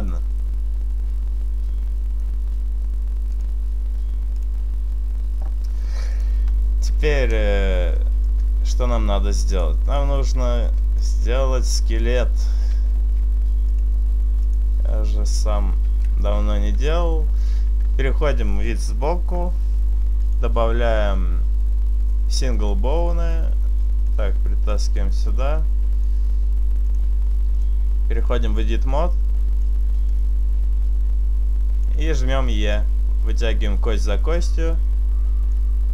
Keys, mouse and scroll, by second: 8.6 click, 9.3 click, 10.4 shift+middle click, 11.3 middle click, 12.6-13.0 scroll down 2, 13.6 click, 15.8 KP_3, 17.1 shift+middle click, 20.2 click, 24.1 click, 26.8 click, 29.1 click, 30.2 click, 32.4 e, 32.7 right click, 33.6 click, 34.0 e, 34.2 right click, 34.5 click.